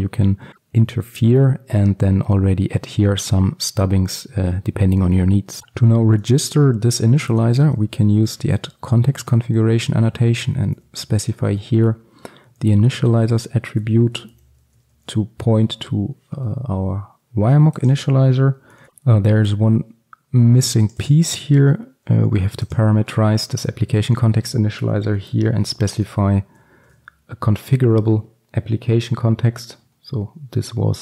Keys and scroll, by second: 5.6 ctrl+x, 10.7 Return, 15.0 ctrl+alt+super+l, 26.1 Return, 26.8 ctrl+alt+super+l.